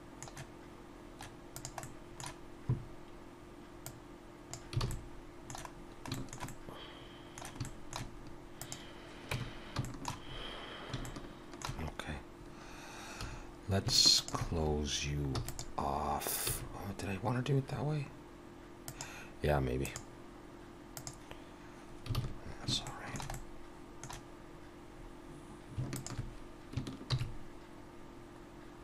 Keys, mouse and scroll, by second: 1.5 click, 1.8 middle click, 3.9 click, 4.8 alt+a, 4.9 middle click, 5.7-6.1 scroll down 1, 6.1 shift+middle click, 6.5 middle click, 7.6 shift+middle click, 8.6 click, 9.3 Tab, 9.8 shift+middle click, 10.3-10.6 scroll up 1, 10.8 scroll up 2, 11.0 shift+middle click, 11.7-12.3 scroll up 1, 13.2 2, 14.2 alt+shift+click, 15.4 e, 16.5 s, 19.8 click, 22.2 alt+a, 22.8 shift+middle click, 23.3 middle click, 25.0-25.7 scroll up 1, 25.9 alt+shift+click, 27.1 ctrl+b.